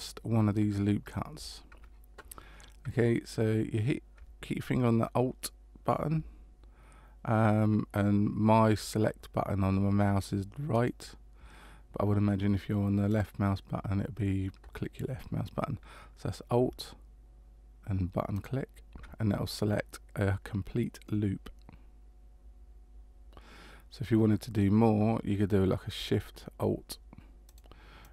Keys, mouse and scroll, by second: 10.7 alt+right click, 13.1 click, 18.3 alt+right click, 21.0 middle click, 27.4 alt+shift+right click.